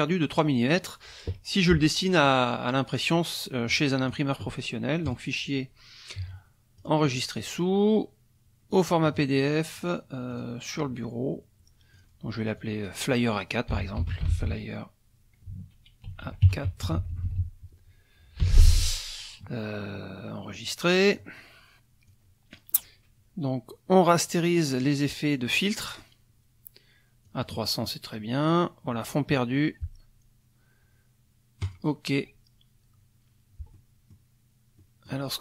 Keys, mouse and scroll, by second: 4.0 click, 5.1 click, 6.8 click, 8.7 click, 9.7 click, 10.3 click, 11.9 click, 12.6 click, 13.5-14.8 typing, 16.1 shift+a, 16.5 shift+KP_4, 16.9 shift+Left, 18.4 l, 20.6 click, 22.1 click, 27.3 click, 31.6 click, 33.7 click, 34.8 click.